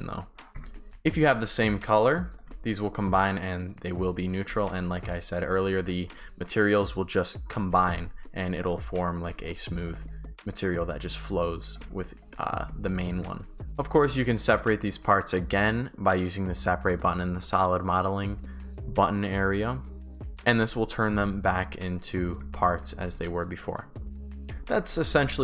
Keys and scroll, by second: 0.5 Pause, 2.6-5.8 typing, 7.9-10.7 typing, 12.9 shift+d, 13.6 Pause, 20.0 Pause, 22.1 Pause, 22.2 shift+w, 22.5 shift+s, 24.1 Pause.